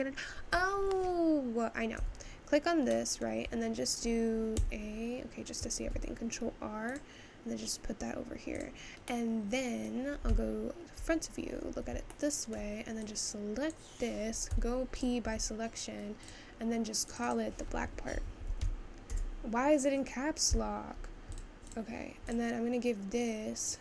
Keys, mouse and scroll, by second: 2.1 Tab, 3.0-4.8 middle drag, 4.8 a, 5.8 ctrl+r, 9.1-11.0 middle drag, 11.0 `, 11.4-12.1 scroll up 2, 12.1-13.8 shift+middle drag, 13.8 click, 15.1 p, 15.4 Tab, 16.3 click, 17.3-20.9 drag, 21.8 click.